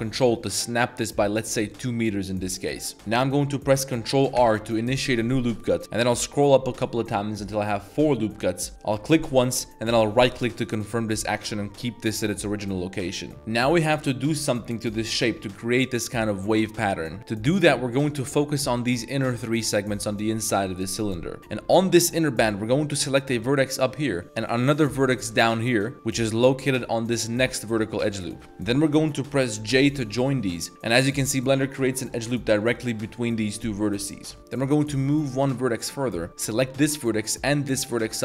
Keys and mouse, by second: 2.6 ctrl+click, 2.9 ctrl+r, 4.3 ctrl+r, 13.3 middle click, 17.2 3, 18.1 alt+click, 18.6 alt+shift+click, 19.2 alt+shift+click, 21.4 a, 21.5 1, 22.8 click, 23.3 g, 25.1 shift+click, 28.0 click, 29.7 j, 30.9 middle click, 31.3 shift+drag, 31.6 shift+click, 32.0 shift+click, 33.8 middle drag, 34.3 middle click, 35.3 shift+click, 36.0 middle click, 37.8 shift+click.